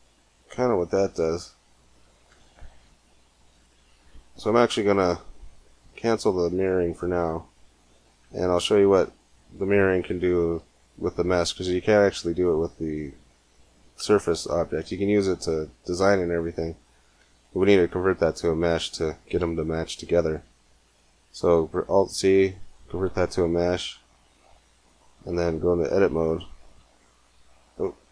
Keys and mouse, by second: 7.2 click, 8.1 Tab, 17.8 alt+c, 23.4 Tab, 25.8 a, 26.0 a, 26.5 a.